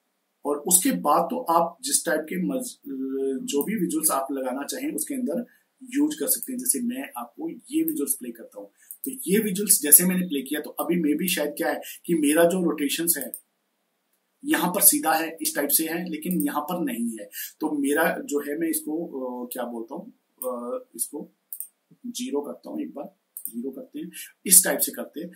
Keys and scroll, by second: 22.6 0.